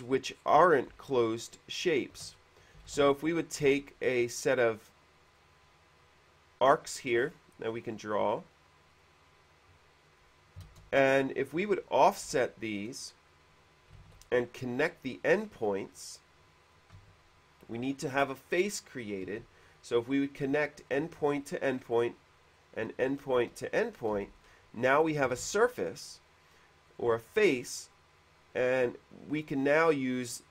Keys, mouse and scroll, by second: 0.6 middle click, 1.2-2.5 shift+middle drag, 2.5 scroll down 1, 3.0-4.4 typing, 3.6 middle click, 4.4 click, 7.4-7.7 scroll up 1, 8.2 click, 9.1 click, 10.4 click, 10.9 space, 11.6 click, 12.6 space, 12.6 f, 13.1 click, 14.2 ctrl+z, 14.8 click, 16.8 click, 17.1-17.8 typing, 18.2 click, 19.6 q, 21.4 q, 22.8 click, 23.9 click, 24.4 space, 25.1 space, 25.6 shift+f, 27.1 click, 29.8 shift+f.